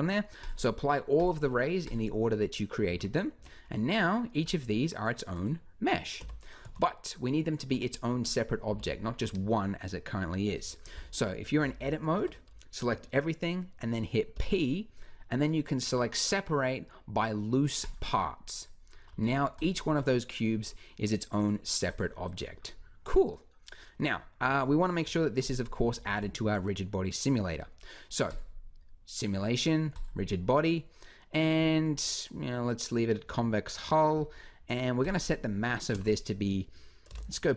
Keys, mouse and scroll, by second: 2.7 z, 3.2 Tab, 6.0 a, 6.4 a, 7.5 Tab, 8.5 g, 11.9 Tab, 14.1 p, 19.0 Tab, 24.8 KP_3, 25.5 z, 25.9 b, 28.2 click.